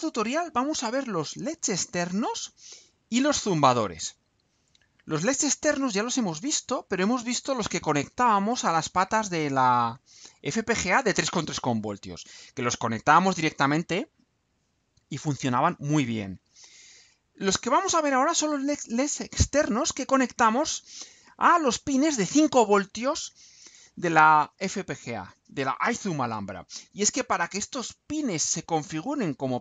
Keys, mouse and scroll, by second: 3.1-4.5 scroll down 4, 5.1-5.6 scroll down 2, 9.9-10.3 scroll up 4, 11.7 scroll up 2, 21.5 scroll down 2.